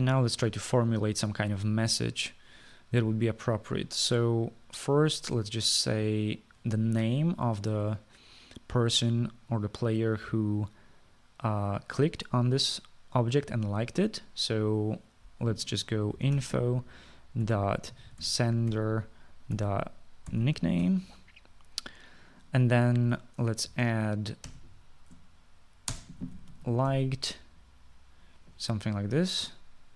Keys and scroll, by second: 17.0-22.4 typing, 24.5-25.6 typing, 27.0-28.5 typing.